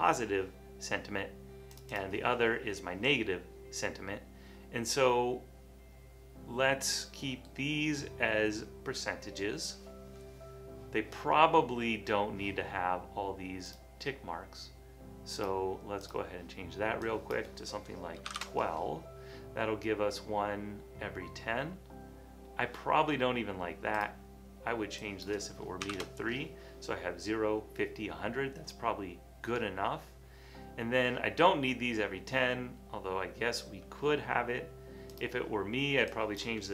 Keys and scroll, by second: 18.1-19.0 typing, 26.0 typing.